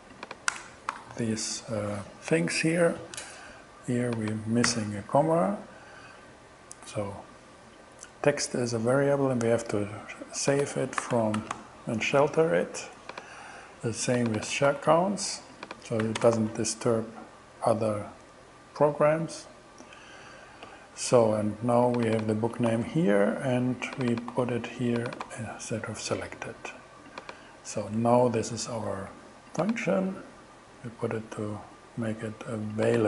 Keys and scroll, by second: 0.5 Return, 0.9 alt+6, 4.7 ,, 10.8-12.1 typing, 14.7 super+c, 16.1 ,, 16.2 space, 16.4 super+v, 22.7 super+c, 24.3 super+v, 27.8 shift+Return.